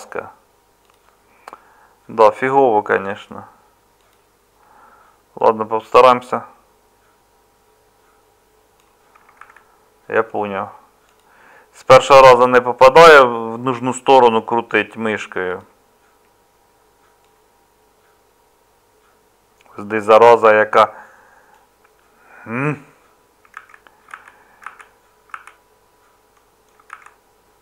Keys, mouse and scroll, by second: 9.4 ctrl+z, 26.9 ctrl+z.